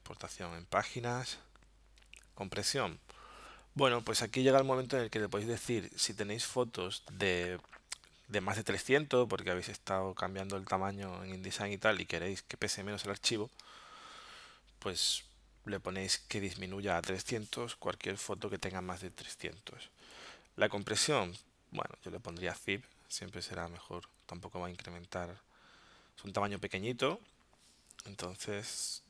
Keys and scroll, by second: 4.6 alt+super+0, 17.9 3, 20.1 Tab.